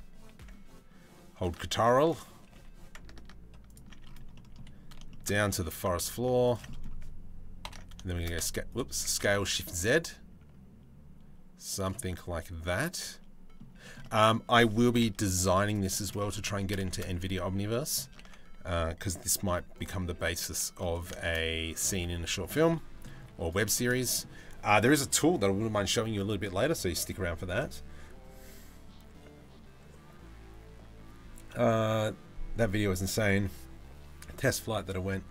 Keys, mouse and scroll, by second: 1.4 3, 1.7 click, 2.1 g, 3.9 middle click, 4.7 shift+middle click, 6.3 middle click, 7.2 ctrl+l, 7.7 shift+s, 8.6 s, 11.7-12.7 middle drag, 13.4 shift+middle click, 13.6 middle click, 14.5 KP_7, 14.7 z, 15.5 shift+middle click, 16.4 shift+middle click, 17.2 h, 17.9 ctrl+z, 19.1 g, 19.7 s, 20.6 s, 21.5 g, 22.3 middle click, 22.8 z, 23.3 shift+middle click, 23.5 middle click.